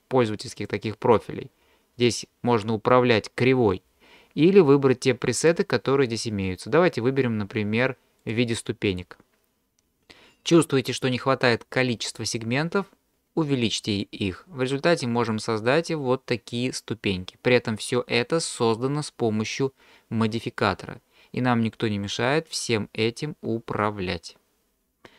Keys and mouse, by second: 0.6 click, 5.4-7.3 drag, 8.2-9.0 drag, 13.7-15.4 drag, 22.2-25.1 drag.